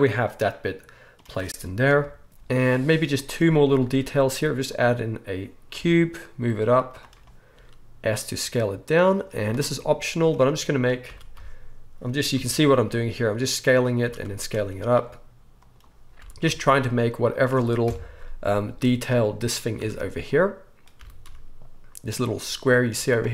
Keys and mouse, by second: 0.0-9.3 right drag, 1.9 KP_1, 2.3 z, 3.8 shift+a, 5.7 g, 7.5 s, 9.3-17.0 drag, 9.3 z, 11.0 s, 14.0 s, 16.1 g, 17.0-23.3 right drag, 17.8 KP_1, 18.1 z, 18.6 z, 19.7 Tab, 20.2 click, 20.2-22.3 middle drag, 20.9 g, 22.9 z.